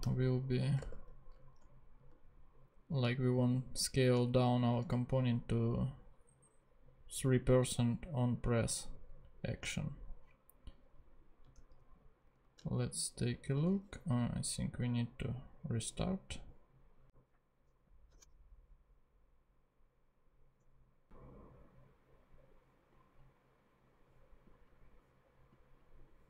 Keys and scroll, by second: 0.0-1.3 typing, 11.5 super+Tab, 13.6 super+Tab, 17.6 super+Tab, 18.2 shift+super+p, 20.5 super+Tab.